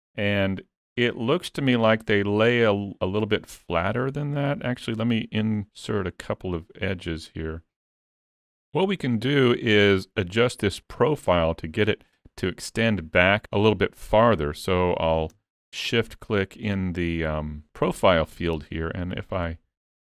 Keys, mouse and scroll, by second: 1.9 middle click, 5.6 click, 8.2 click, 15.0 click.